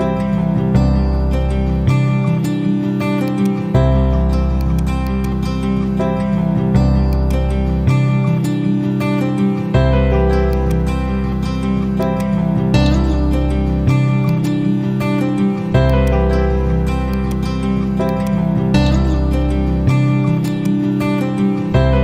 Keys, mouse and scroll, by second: 3.2-5.9 drag, 6.3 typing, 14.2-15.5 drag.